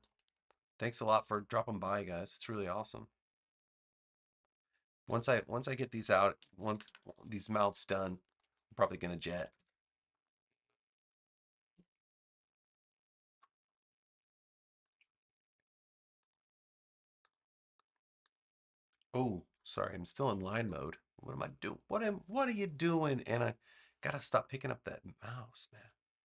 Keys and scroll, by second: 0.2 a, 6.3 super+-, 8.0 space, 9.2 super+=, 10.2 space, 11.6 super+=, 12.3 space, 19.4 super+z.